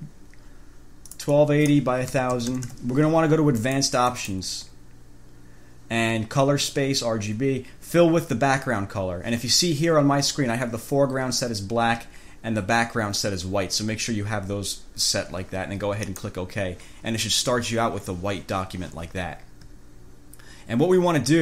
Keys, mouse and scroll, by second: 1.3-2.1 drag, 2.3 1, 2.5 0, 3.9 click, 4.3 click, 16.3 click, 20.6 ctrl+scroll up 2, 21.2 ctrl+scroll down 2.